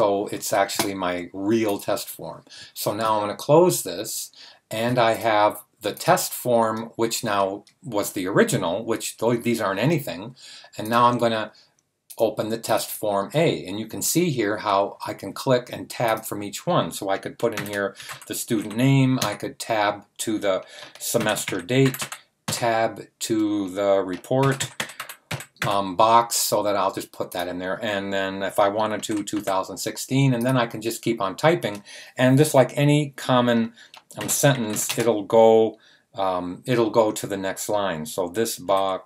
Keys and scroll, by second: 17.3-19.2 typing, 20.9-22.4 typing, 24.1-26.0 typing, 28.4-29.8 typing, 33.9-35.2 typing, 38.3-39.0 typing.